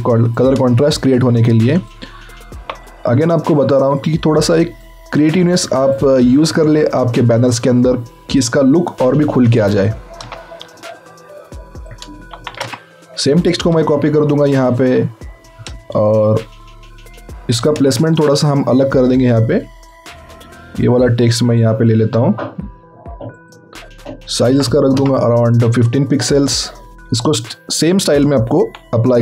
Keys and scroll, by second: 0.8 ctrl+t, 1.3 ctrl+alt+t, 10.2 alt+Tab, 12.3 ctrl+c, 12.6 ctrl+alt+Tab, 17.8 ctrl+a, 18.1 ctrl+v, 24.6 KP_5, 24.9 Return, 28.5 ctrl+x.